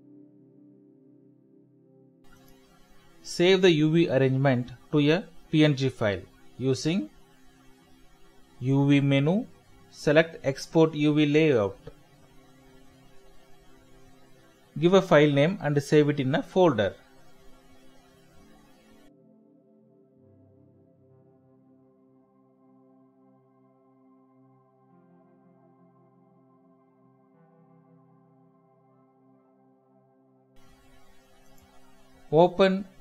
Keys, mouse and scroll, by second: 0.8 middle click, 2.4 middle click, 5.7 shift+middle click, 6.2 ctrl+F1, 15.4-16.8 typing, 19.7-20.5 typing, 24.4-25.2 typing, 27.4 double click, 27.9 double click.